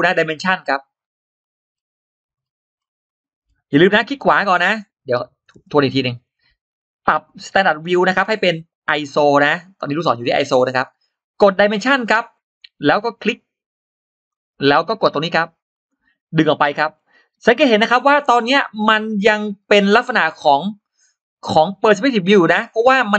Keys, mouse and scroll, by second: 1.1 click, 1.5 scroll down 2, 2.2-2.5 scroll down 2, 2.6 scroll up 2, 3.3 scroll down 2, 5.1 click, 6.1 right click, 10.5 click, 11.7 click, 14.1 click, 15.5 click, 16.7-17.1 scroll up 2, 17.5 scroll down 2, 18.0-18.7 scroll up 4, 20.3-20.9 scroll down 2, 21.5-21.8 scroll up 2.